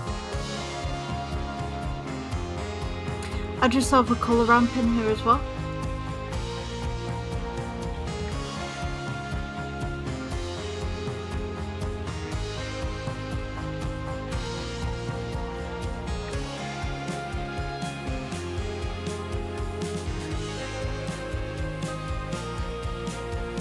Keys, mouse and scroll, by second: 6.4-23.6 drag.